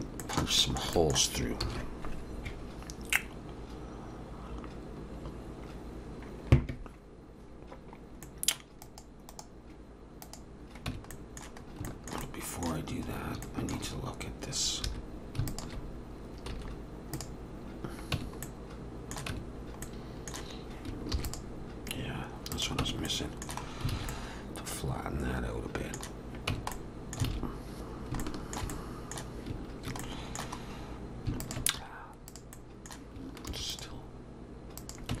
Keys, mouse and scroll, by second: 0.2 shift+middle click, 0.4 shift+middle click, 1.0 shift+middle click, 2.4 ctrl+s, 8.3 middle click, 8.8 click, 9.3 right click, 10.9 Tab, 11.1 middle click, 11.6 scroll up 1, 11.9 shift+middle click, 12.3 middle click, 13.1 scroll up 2, 13.4 shift+middle click, 14.9 2, 15.5 alt+shift+click, 16.5 x, 18.2 Tab, 18.5 middle click, 19.3 Tab, 19.9 middle click, 21.1 ctrl+r, 22.8 Tab, 23.1 middle click, 23.7 scroll down 2, 23.9 alt+a, 24.1 middle click, 26.5 Tab, 26.7 middle click, 27.3 alt+a, 28.2 alt+shift+middle click, 28.7 middle click, 30.0 middle click, 30.3 alt+shift+middle click, 30.6-31.3 scroll up 1, 31.4 alt+shift+click, 31.8 x, 32.5 middle click, 33.5 ctrl+r, 35.1 Tab.